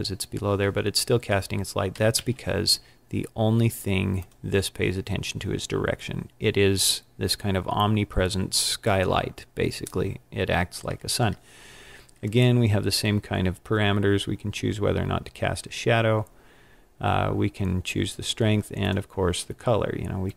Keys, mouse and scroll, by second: 2.0 g, 4.4 click, 18.8 click.